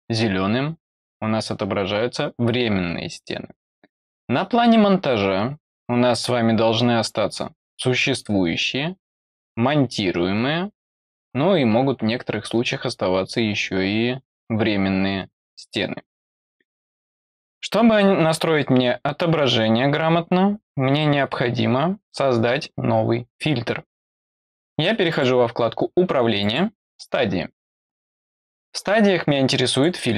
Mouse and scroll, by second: 25.0 click, 26.3 click, 29.6 click.